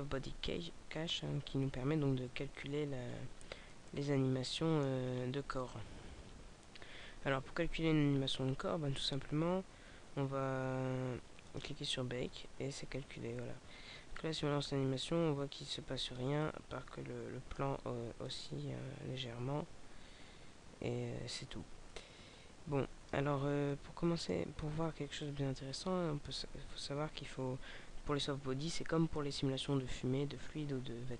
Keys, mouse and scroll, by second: 1.2-2.9 scroll down 2, 3.1-3.9 scroll up 5, 3.9 middle click, 5.1-5.7 scroll up 3, 6.1-7.1 scroll down 4, 11.4 click, 14.1 click, 16.3 middle click, 18.3 click, 23.7 middle click, 25.2 click.